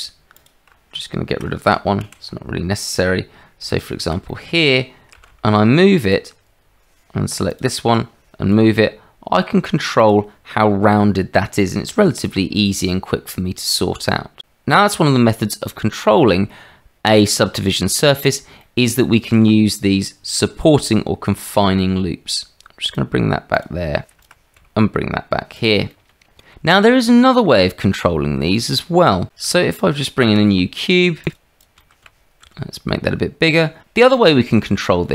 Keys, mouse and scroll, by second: 0.4 alt+click, 2.0 ctrl+x, 4.3 click, 5.5 g, 8.5 g, 10.6-11.8 middle drag, 18.6 middle click, 21.5 g, 24.5 g, 25.9 click, 26.4 shift+middle click, 27.2 shift+middle click, 27.8 Tab, 28.6 click, 30.2 shift+a, 31.1 a, 32.4 g, 32.4 s.